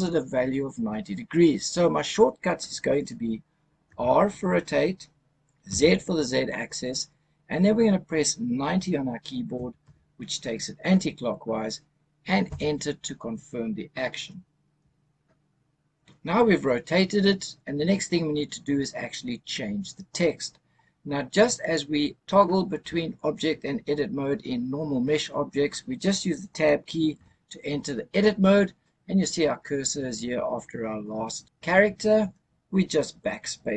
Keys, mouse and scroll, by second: 3.8 r, 5.5 z, 9.4 KP_9, 9.7 KP_0, 12.3 KP_Enter, 27.1 Tab.